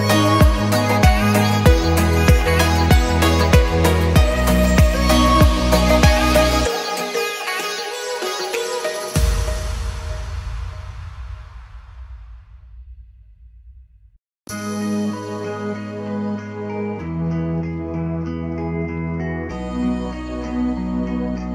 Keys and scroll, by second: 5.8 Escape, 12.8 m, 14.2 Escape, 14.9 m, 17.8 Escape.